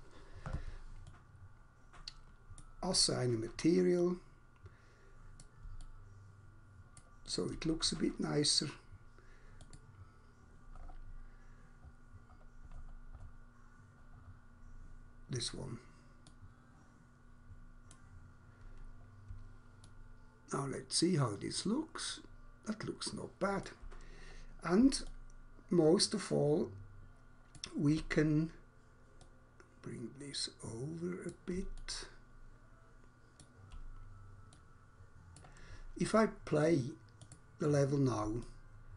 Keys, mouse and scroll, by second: 1.0 alt+click, 4.0 click, 5.4 click, 5.9 alt+click, 9.6 click, 10.7 scroll down 1, 16.2 click, 17.9 click, 19.9 alt+click, 24.2 scroll down 1, 25.0 alt+click, 29.2 click, 31.2 click, 31.7 alt+click, 35.4 click, 37.2 click, 37.4 click, 38.4 alt+click.